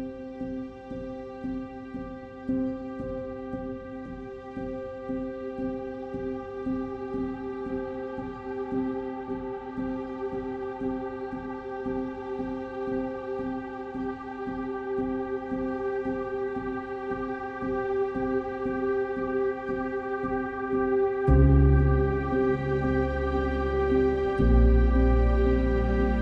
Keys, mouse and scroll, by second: 4.0 ctrl+s, 6.2 ctrl+s.